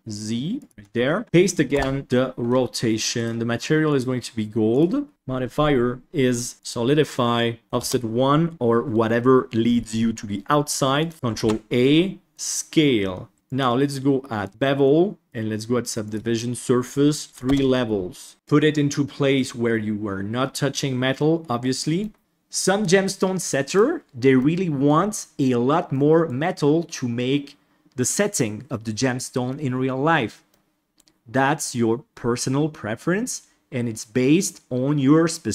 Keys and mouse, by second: 0.7 Tab, 1.2 click, 3.1 drag, 5.1-6.6 drag, 7.6 click, 11.0 click, 11.3 ctrl+a, 13.5-14.5 drag, 15.2 click, 17.2 click, 18.3-22.0 middle drag, 22.2 click, 23.2 click, 24.4 middle click, 26.0 middle click, 30.5 middle click.